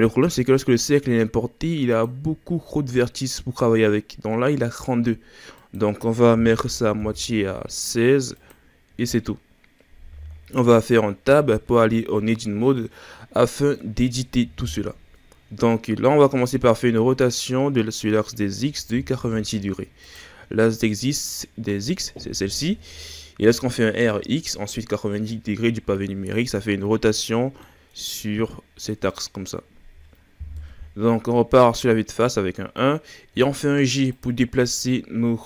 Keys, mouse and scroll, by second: 1.9-4.9 drag, 5.6-8.5 drag, 11.3 Tab, 12.8-14.6 middle drag, 14.6 KP_1, 15.9-16.7 ctrl+scroll up 2, 16.7-17.1 scroll up 3, 17.1 r, 20.8-23.9 scroll down 2, 27.6-30.6 middle drag, 30.6 KP_1, 31.9-33.3 scroll up 3, 33.3 g, 34.6 s.